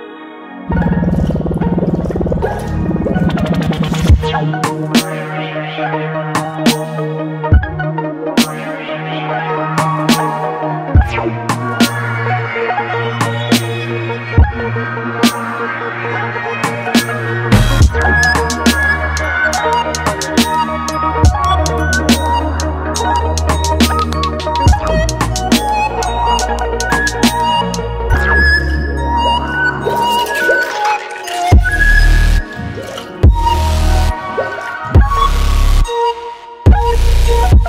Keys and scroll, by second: 12.5 ctrl+z, 13.2 x, 30.3 x.